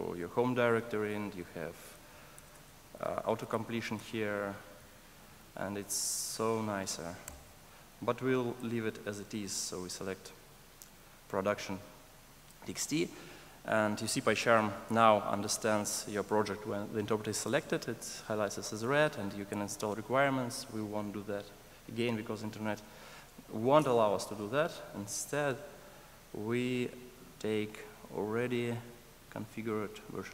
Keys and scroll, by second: 2.4 alt+BackSpace.